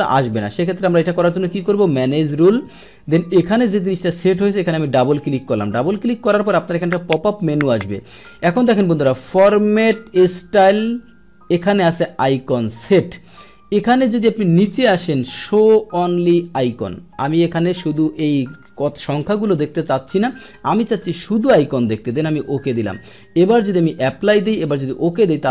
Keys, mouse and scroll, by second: 0.2 click, 1.9 click, 3.1-3.5 drag, 4.4 click, 4.6 click, 6.0 click, 16.6 click, 22.3 click, 23.9-24.7 drag.